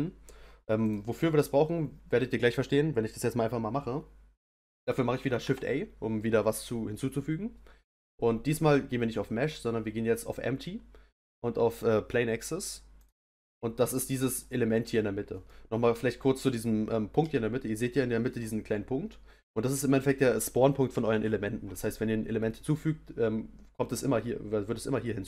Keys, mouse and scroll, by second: 0.8 click, 5.4 shift+a, 14.0-18.4 middle drag, 18.4 scroll up 1.